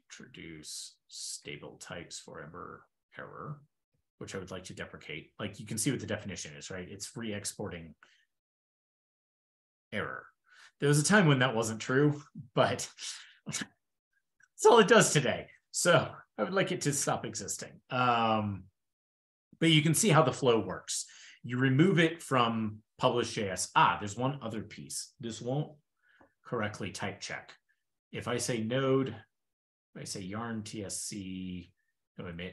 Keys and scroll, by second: 2.3 ctrl+e, 5.1 super+Tab, 18.3 super+w, 21.5 shift+super+[, 29.4 ctrl+a, 29.5 ctrl+k, 32.1 ctrl+e.